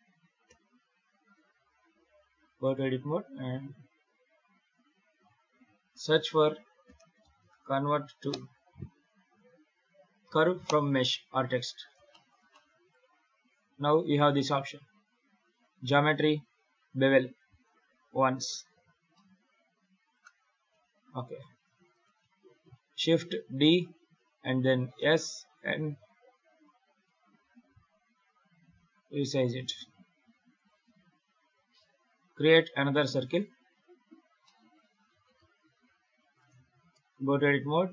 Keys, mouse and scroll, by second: 0.3 KP_7, 1.4-2.4 scroll up 5, 3.1 Tab, 6.0 F3, 11.6 scroll down 2, 12.0 shift+middle click, 12.4 middle click, 12.8-13.9 scroll down 2, 13.9 click, 15.4 click, 17.4 click, 18.1-18.4 scroll up 4, 18.4 scroll down 1, 18.7 alt+a, 19.0 middle click, 20.6 KP_7, 21.8 right click, 23.3 shift+d, 30.8-31.1 scroll down 4, 31.1 scroll up 4, 31.5 shift+a, 34.3 middle click, 34.8 g, 36.8 Tab.